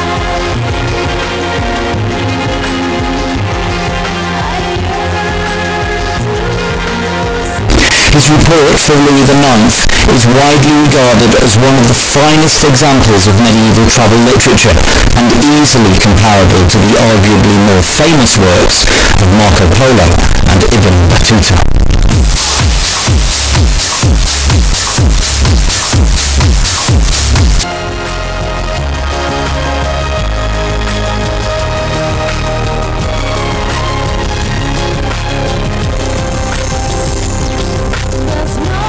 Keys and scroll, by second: 27.6 Page_Down.